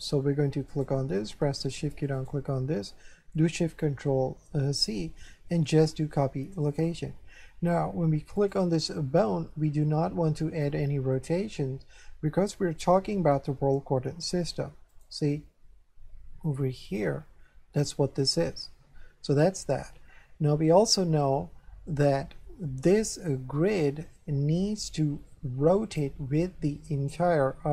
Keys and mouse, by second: 0.7 right click, 2.2 shift+right click, 4.6 ctrl+shift+c, 6.6 click, 8.4 right click, 14.9 right click, 16.9 click, 23.7 right click.